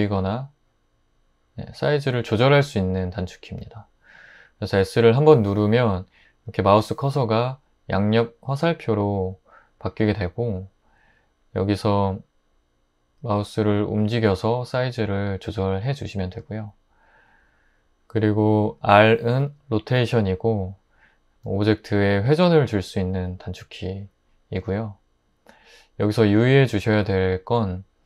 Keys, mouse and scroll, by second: 21.4 r.